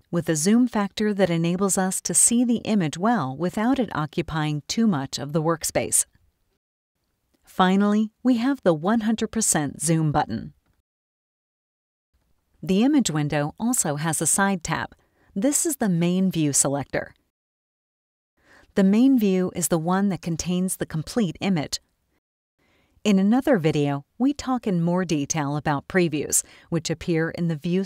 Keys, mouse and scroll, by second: 10.7 click, 19.2-21.1 scroll up 4.